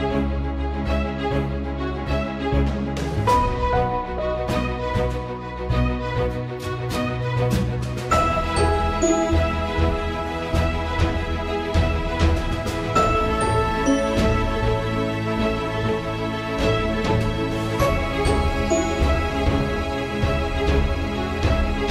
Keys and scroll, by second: 0.1 alt+/, 0.2 ctrl+s, 2.4 Return, 8.0 ctrl+s, 20.8 ctrl+s.